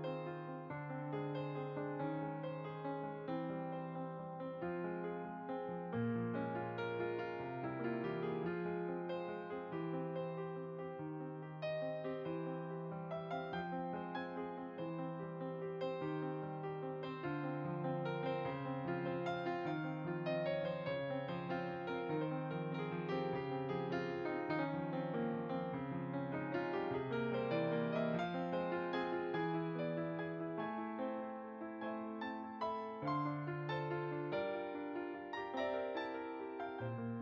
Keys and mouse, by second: 2.0 click, 12.5 click, 14.0 middle click, 16.5 click, 17.8 ctrl+a, 18.2 click, 25.7 middle click, 26.5 shift+r, 27.4 click, 28.3 ctrl+r, 28.9 shift+click, 29.6 middle click, 30.0 shift+click, 31.1 click, 31.6 shift+click, 34.2 shift+click, 35.4 click, 36.0 shift+click, 36.8 middle click.